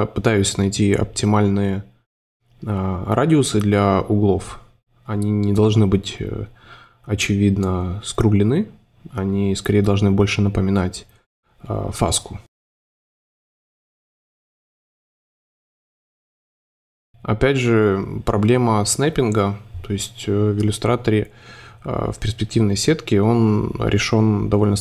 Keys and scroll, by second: 0.7 Delete, 2.1 Up, 5.6 space, 7.0 v, 7.6 shift+v, 8.4 super+c, 8.4 super+f, 10.6 super+5, 13.3 5, 14.2 5, 15.9 space, 16.5 super+z, 17.2 5, 19.3 space.